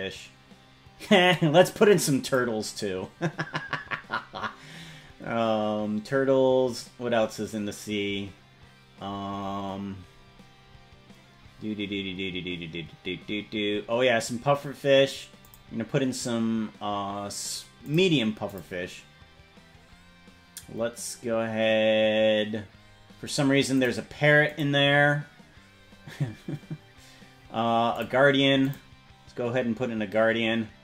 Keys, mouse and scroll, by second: 0.2-0.6 scroll down 1, 1.3 click, 2.2 click, 4.1-4.8 scroll down 3, 5.2-5.8 scroll down 4, 6.2 scroll down 1, 7.0-7.4 scroll down 2, 8.2-10.1 scroll up 11, 10.3-13.5 scroll up 22, 13.7 scroll down 1, 15.5 click, 16.3 scroll down 2, 17.9 click, 18.5 click, 19.8-20.2 scroll up 4, 20.6-22.4 scroll up 9, 22.9-23.5 scroll down 2, 23.8 click, 24.5 click, 25.3-27.2 scroll up 8, 28.0 click, 28.6 click, 29.4-30.2 scroll up 3, 30.6 scroll up 1.